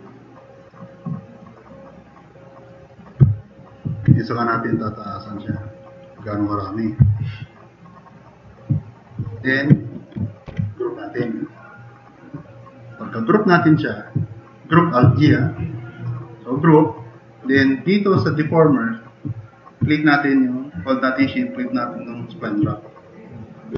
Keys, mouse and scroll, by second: 3.2 drag, 3.4 middle click, 7.2 middle drag, 10.5 alt+g.